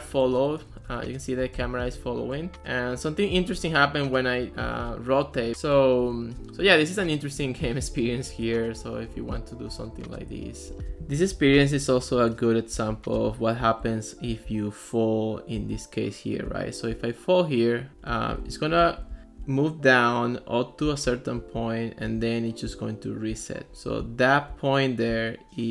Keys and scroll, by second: 0.7-2.6 typing, 4.5 Up, 4.8 Down, 5.5-10.7 typing.